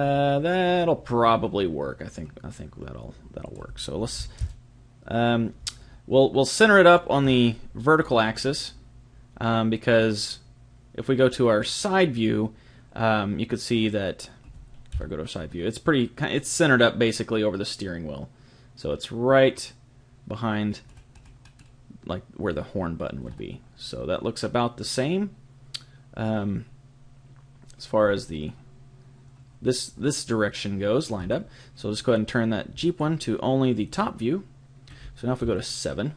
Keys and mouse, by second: 3.4 click, 7.2-10.9 middle drag, 14.9 KP_3, 20.9-23.2 middle drag, 23.3-25.9 middle drag, 31.1-32.9 middle drag, 32.9 click, 35.4 KP_7.